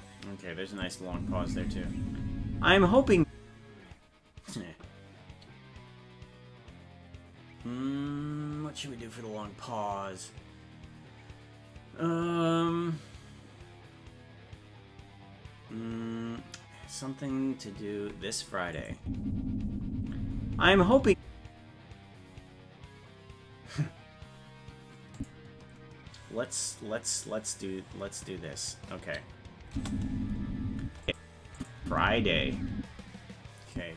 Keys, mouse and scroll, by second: 0.8 click, 1.1 space, 18.7 click, 19.0 space, 23.8 space, 25.1 click, 29.7 space, 31.0 click, 31.5 click, 31.8 space, 33.7 click, 33.7 space.